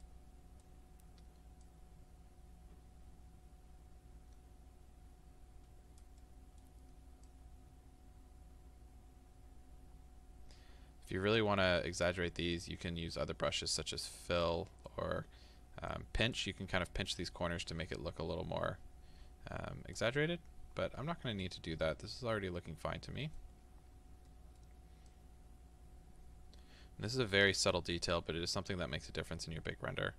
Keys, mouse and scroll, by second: 0.9-1.7 scroll up 2, 1.7-6.3 drag, 6.3-7.3 middle drag, 7.3-14.5 drag, 14.5-15.9 middle drag, 15.9-21.5 drag, 20.6-21.0 scroll up 2, 21.0-21.5 scroll down 2, 21.5-25.1 middle drag, 23.8 scroll up 1, 25.1-30.1 drag.